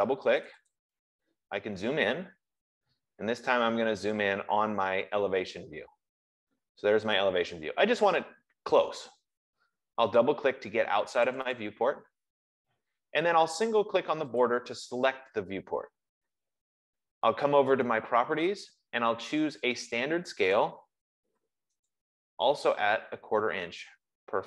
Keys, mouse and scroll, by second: 0.8 click, 1.0 click, 1.9 middle click, 2.3 middle click, 3.1 middle click, 3.9 scroll, 4.6-5.0 scroll, 5.8 scroll, 11.6 click, 12.0 click, 14.7 click, 20.9 click, 22.2 click.